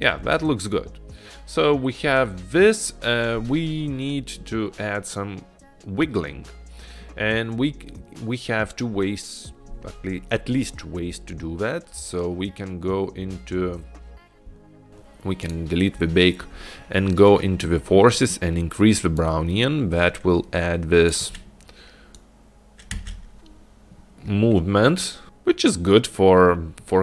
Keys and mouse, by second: 0.4 space, 15.5 drag, 19.3-21.2 drag, 22.5 click, 23.2 space, 26.6 space.